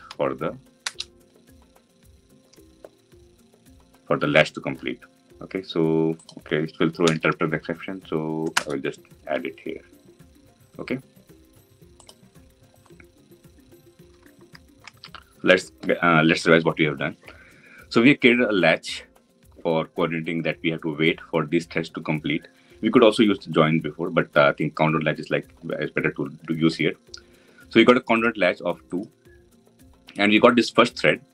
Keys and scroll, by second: 0.5 Return, 6.8 alt+Return.